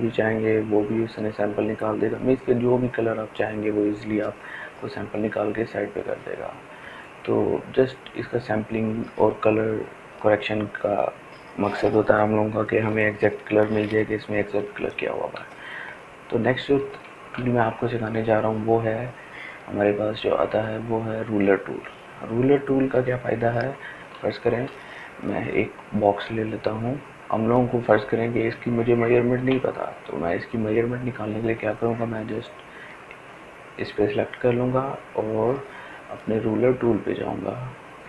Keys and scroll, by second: 13.0 ctrl+space, 13.5 ctrl+space.